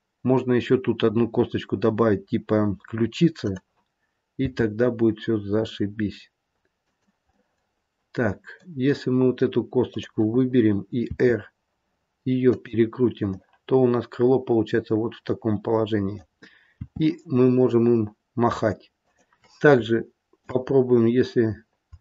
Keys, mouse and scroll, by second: 3.4 click, 4.3 r, 7.2 middle click, 9.7 click, 11.1 r, 13.2 middle click, 16.8 r, 19.8 shift+middle click, 20.6-21.3 scroll up 1, 21.3 scroll down 1, 21.5 scroll down 1, 21.9 shift+middle click.